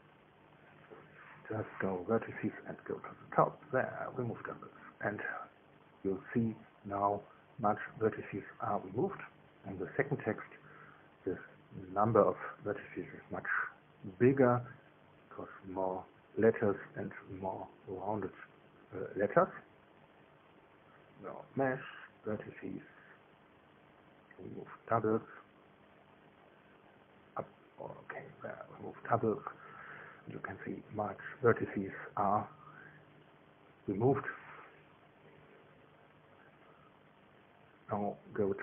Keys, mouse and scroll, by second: 2.7 click, 4.5 click, 12.4 Tab, 13.2 right click, 15.9 Tab, 17.2 a, 21.9 click, 24.4 click, 28.9 click, 31.1 Tab, 32.9 Tab, 33.3 Tab, 34.0 middle click, 34.5 middle click.